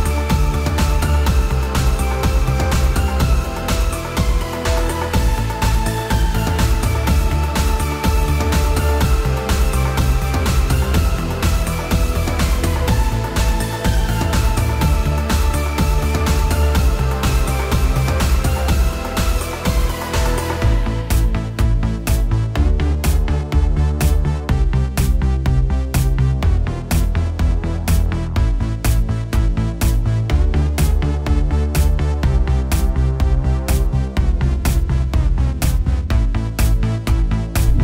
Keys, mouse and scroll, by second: 0.1-0.4 scroll up 1, 0.8 shift+middle click, 1.8 click, 3.0 middle click, 5.4 click, 5.6 ctrl+z, 15.7 click, 18.3-20.1 drag, 22.3-23.5 drag, 25.5 click, 27.9-29.5 middle drag, 30.0-30.6 shift+middle drag, 32.2-34.3 shift+middle drag.